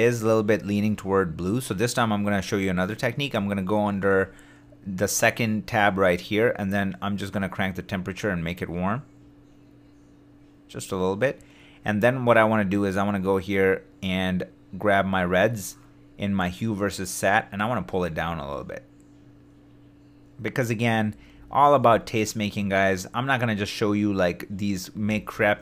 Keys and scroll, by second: 21.1 super+d, 25.0 super+d.